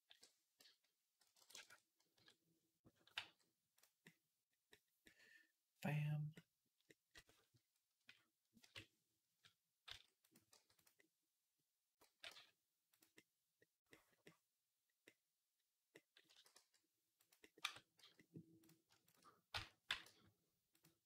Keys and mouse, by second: 2.0 KP_3, 3.0 g, 3.7-6.1 middle drag, 7.8 KP_1, 8.4 KP_3, 9.7 s, 10.3 g, 10.8-17.4 drag, 11.9 g, 16.2 s, 17.4 Tab, 17.4-18.4 middle drag, 17.8 z, 18.4 click, 18.5-21.0 shift+middle drag, 19.4 z, 19.7 g.